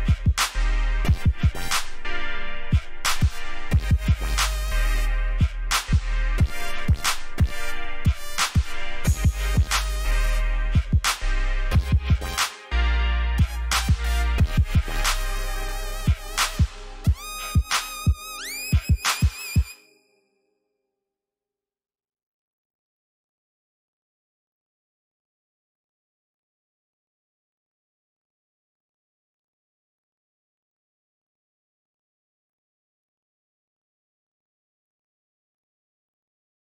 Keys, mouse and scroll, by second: 0.0 alt+scroll down 1, 1.3-2.4 scroll down 1, 2.4 b, 4.6 click, 9.3 alt+click, 9.9-10.5 alt+scroll up 4, 11.9 click, 14.6 alt+scroll down 1, 15.5 alt+click, 16.7 click, 18.2 alt+click, 21.0-23.8 typing, 24.5 Escape, 27.2 alt+scroll up 1, 28.1 alt+click, 29.0 click, 36.2 alt+scroll down 1.